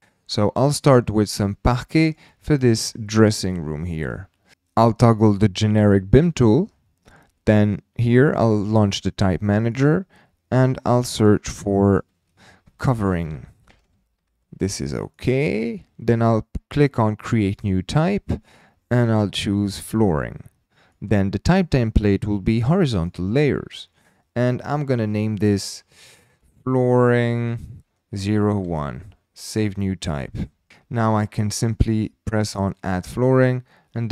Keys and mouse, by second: 0.3-0.7 middle drag, 1.2 middle drag, 2.0 click, 2.8 KP_7, 4.1 shift+middle click, 6.4 click, 9.8-33.7 drag, 13.8 BackSpace, 32.9 typing.